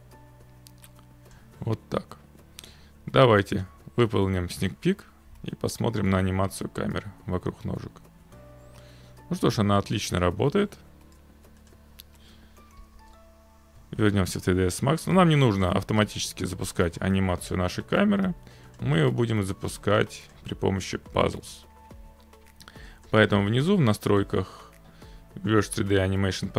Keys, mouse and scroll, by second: 1.3 click, 3.6 click, 4.6 click, 13.0 alt+Tab, 15.6 click, 18.8 click, 20.3 click, 21.3 click, 23.1 click, 23.3-24.7 scroll.